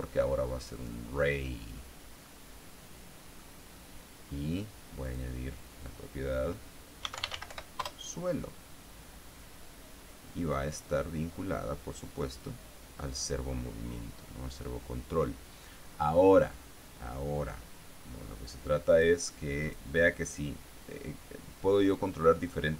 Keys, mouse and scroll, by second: 1.2 click, 2.8-4.1 middle drag, 5.6 click, 7.3-8.5 typing, 11.2-13.0 drag, 19.4 click, 20.1 click.